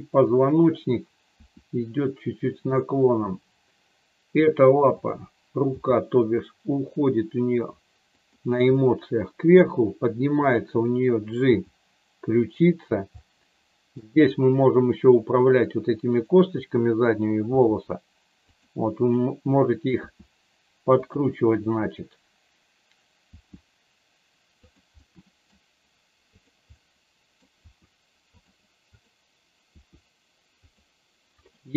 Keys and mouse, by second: 1.2 r, 4.9 click, 5.6 g, 8.1 click, 8.7 middle click, 10.4 click, 11.4 g, 12.5 click, 13.3 middle click, 16.0 click, 17.5 r, 19.1 click, 19.9 r, 20.9 click, 23.2 r, 25.0 middle click, 26.4 click, 26.7 middle click, 27.6 r, 28.9 click, 29.7 r, 30.6 click.